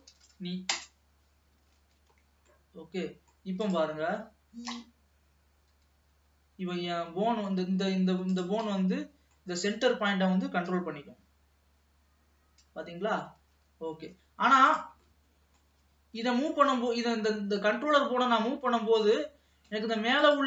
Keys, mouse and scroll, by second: 0.3 e, 2.0 ctrl+s, 2.4-2.9 scroll up 2, 2.9 middle click, 3.7 click, 4.6 middle click, 5.2-5.9 scroll up 1, 5.9 g, 8.3 click, 8.9-10.7 middle drag, 10.7 g, 14.4 ctrl+s, 14.7 click, 15.3-16.3 middle drag, 16.3 g, 20.3 click.